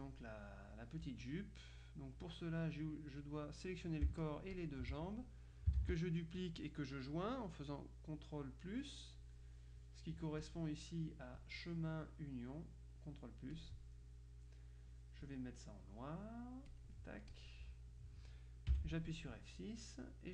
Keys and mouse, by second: 0.0 click, 4.3 shift+click, 5.9 ctrl+d, 9.5 right click, 10.5 click, 11.5 click, 13.6 click, 16.8-18.0 drag, 18.8 F6.